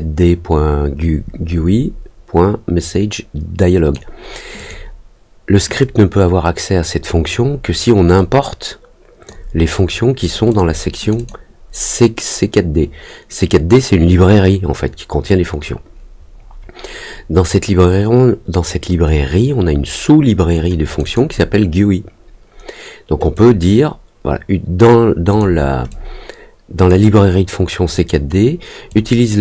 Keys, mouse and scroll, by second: 4.5 click, 5.7-7.3 drag, 8.1-9.2 drag, 10.4 click, 11.0 click, 11.1 click, 20.8 click, 23.3-24.7 drag, 25.2 click, 25.8 click, 28.8-29.4 drag.